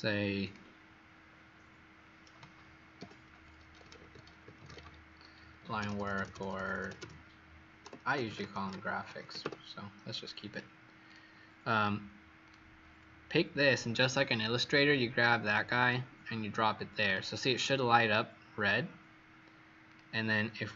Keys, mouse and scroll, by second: 2.9-9.9 typing, 10.4 click, 11.0 click, 12.4 click, 17.4 click, 19.8 click.